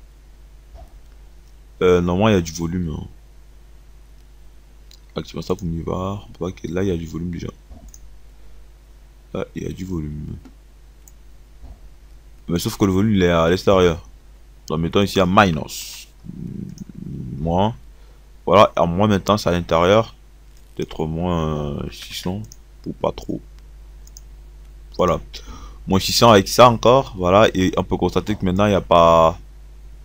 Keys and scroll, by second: 21.3 6, 22.1 0.